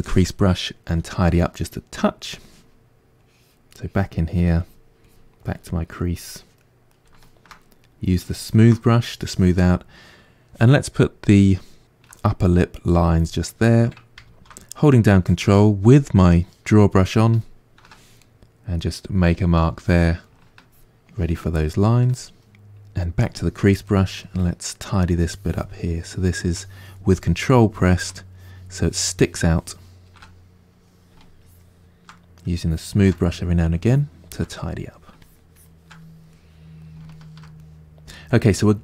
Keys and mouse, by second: 0.0 click, 0.9 f, 3.3-6.6 drag, 6.6 middle click, 7.2 shift+click, 7.8 middle click, 8.5 shift+click, 8.9-11.3 middle drag, 11.3 click, 11.8-13.0 ctrl+middle drag, 13.0-18.2 drag, 14.4 ctrl+z, 18.2-20.5 middle drag, 20.5-21.5 ctrl+drag, 21.5 middle click, 22.1 shift+click, 22.4 middle click, 23.3 click, 23.9-25.2 middle drag, 25.2-30.3 ctrl+drag, 30.3-31.4 middle drag, 31.4 shift+click, 32.2 middle click, 32.7 shift+click, 33.2 middle click, 33.9 shift+click, 34.6 middle click, 35.2-36.3 shift+drag, 36.3-38.8 middle drag.